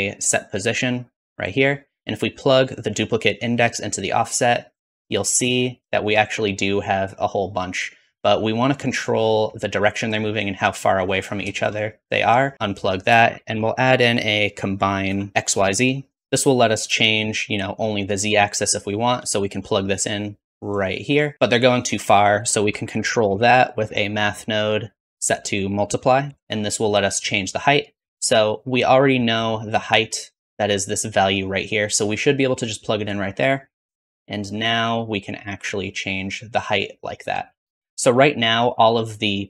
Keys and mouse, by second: 2.5-4.0 drag, 13.1 shift+a, 16.2-18.1 middle drag, 19.7-21.3 drag, 22.3 shift+a, 25.4 click, 25.5 middle click, 25.8-28.8 drag, 28.8-31.2 middle drag, 32.5-36.8 drag, 37.1-39.1 shift+middle drag, 39.1 shift+z.